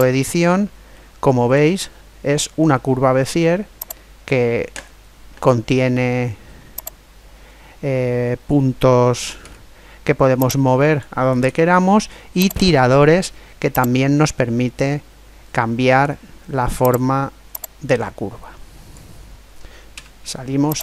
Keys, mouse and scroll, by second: 1.0-3.0 middle drag, 3.8 right click, 6.8-8.6 drag, 9.4 ctrl+z, 10.4-12.2 drag, 11.5 ctrl+z, 12.4-13.7 right drag, 13.7 click, 14.1 middle click, 16.8 right click, 17.6 click, 20.0 Tab.